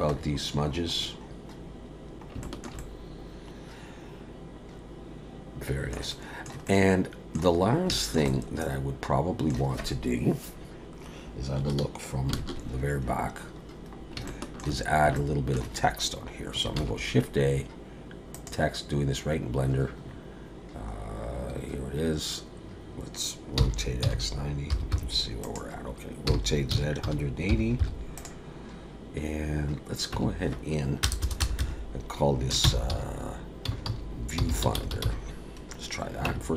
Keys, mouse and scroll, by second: 1.9 ctrl+s, 2.4 shift+middle click, 2.8 middle click, 6.1 middle click, 6.7 middle click, 7.6 scroll up 3, 7.9 shift+middle click, 8.3 middle click, 12.3 ctrl+KP_1, 13.9 scroll down 1, 14.3 shift+middle click, 15.0 scroll up 1, 15.2 shift+middle click, 16.8 shift+a, 20.0-21.0 scroll down 5, 21.0-22.2 scroll up 1, 22.2-23.3 scroll up 1, 23.6 r, 26.3 r, 30.1 Tab, 31.0 BackSpace, 31.2 BackSpace, 31.4 BackSpace, 31.6 BackSpace, 32.6-35.0 typing, 36.3 Tab.